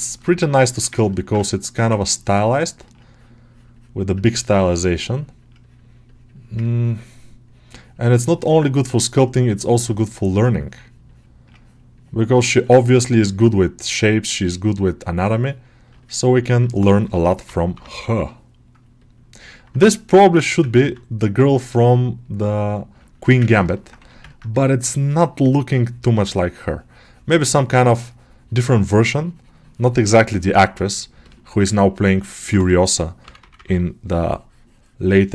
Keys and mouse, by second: 0.4 alt+shift+middle click, 0.9-6.6 ctrl+alt+middle drag, 6.6-10.7 ctrl+drag, 10.9 ctrl+click, 12.6 ctrl+middle click, 13.0 ctrl+alt+middle click, 14.2 ctrl+click, 14.8-15.9 ctrl+drag, 15.9-16.9 alt+middle drag, 16.9 g, 17.3 ], 17.5 ], 17.8 ], 18.8 click, 19.3-20.8 alt+middle drag, 22.9 shift+middle click, 23.2 alt+middle click, 23.4 ctrl+alt+middle click, 23.6 alt+middle click, 24.2 middle click, 24.4 right click, 30.1 shift+click, 31.1 alt+shift+middle click, 31.4 middle click, 31.6 ctrl+alt+middle click, 32.0 middle click, 33.3 [, 33.4 [, 34.1 middle click.